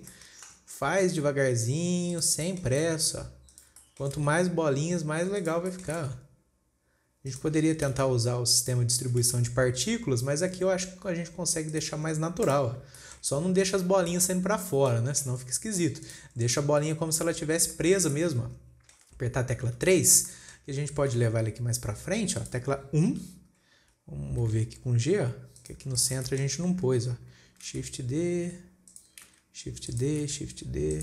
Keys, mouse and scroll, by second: 0.4 scroll up 2, 0.6-1.0 shift+middle drag, 1.0 shift+d, 2.9 shift+middle click, 3.3 shift+d, 4.3 shift+middle click, 4.7 shift+d, 6.1-6.5 shift+middle drag, 6.5 shift+d, 8.3 shift+d, 9.4 scroll down 1, 9.7 shift+d, 12.5 scroll down 4, 12.9 click, 13.4 shift+middle click, 13.9-14.2 scroll up 2, 14.6-15.1 shift+middle drag, 15.1 scroll down 2, 15.3-15.9 middle drag, 15.9 scroll up 2, 16.5 click, 16.9 scroll down 2, 18.2-20.2 shift+middle drag, 20.2 KP_3, 20.8-21.6 shift+middle drag, 21.6 shift+d, 23.5 KP_1, 24.1 scroll up 2, 24.9 g, 26.5-26.9 shift+middle drag, 26.9 shift+scroll up 1, 28.2 shift+d, 29.7 shift+d.